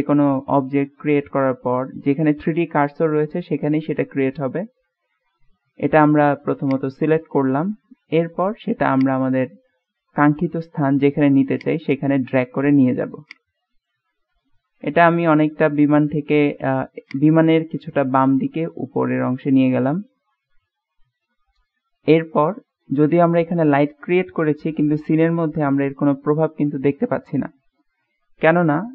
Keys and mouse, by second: 4.1-5.5 middle drag, 6.8 click, 7.6-8.4 middle drag, 9.1 click, 10.4 click, 11.6 click, 13.4 click, 14.9 KP_7, 17.1 click, 18.4-19.3 drag, 19.6-22.6 drag.